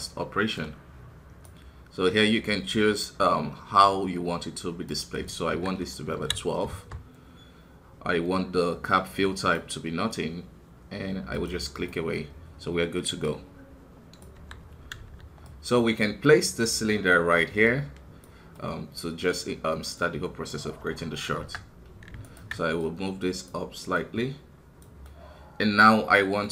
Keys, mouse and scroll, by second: 11.3 click, 12.0 middle click, 12.2-13.2 scroll up 1, 14.3 KP_1, 15.4-18.5 drag, 18.5-20.8 middle drag, 20.8 KP_1, 21.3 Tab, 21.6-22.0 scroll up 1, 22.2-23.9 alt+right drag, 23.9-25.0 drag, 25.0-26.5 middle drag.